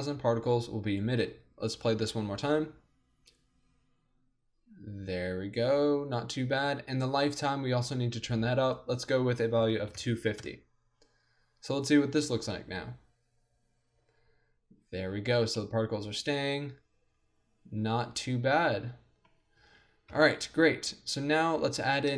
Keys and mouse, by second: 0.9-4.8 drag, 2.1 alt+a, 6.7 alt+a, 8.6-15.3 drag, 12.4 alt+a, 15.3 middle click, 15.6-17.3 drag, 19.7 alt+a, 20.1-21.5 middle drag, 20.1 KP_1.